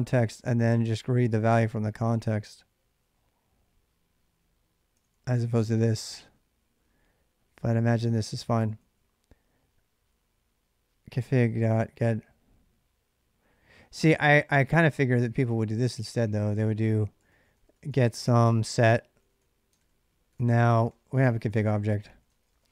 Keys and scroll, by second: 1.1 k, 1.3 k, 4.7-9.3 typing, 13.3-22.7 typing, 16.6 ctrl+[.